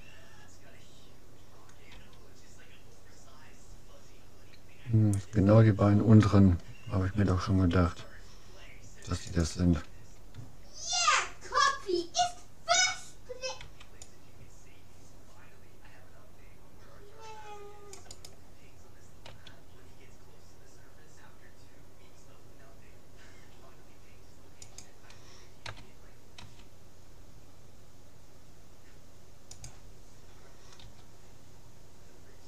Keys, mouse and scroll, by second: 1.9 g, 10.0 a, 10.8-13.4 middle drag, 13.6 c, 19.3 s, 25.6 s, 30.8 g.